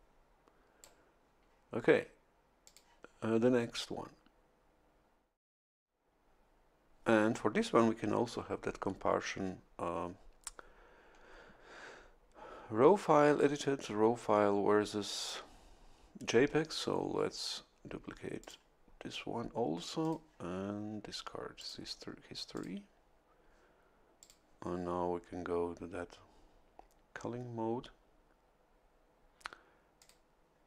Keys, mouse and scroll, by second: 2.6 click, 15.2 click, 18.4 click, 20.0 click, 21.5 click, 22.5 click, 24.2 click, 29.9 click.